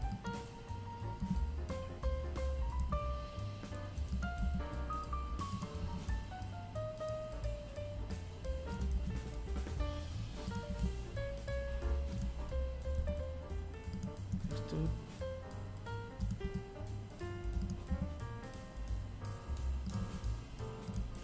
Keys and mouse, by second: 0.7 g, 2.3 s, 3.8 g, 6.9 r, 8.6 s, 10.9 g, 12.3 e, 14.4 r, 15.8 s, 17.9 g, 19.2 e, 20.7 g.